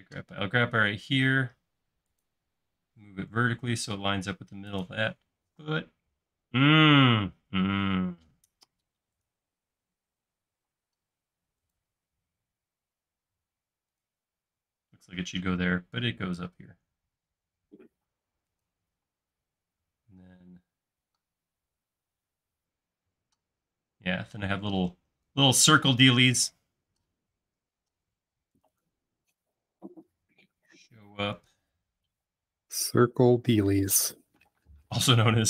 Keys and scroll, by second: 3.4 Up, 5.6 m, 10.7 m, 19.1 space, 31.2-31.9 typing.